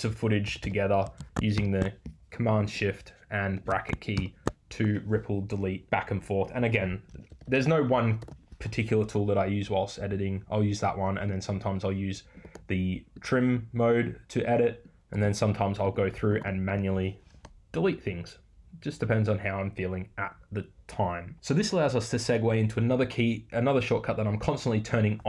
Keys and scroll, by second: 17.3 BackSpace.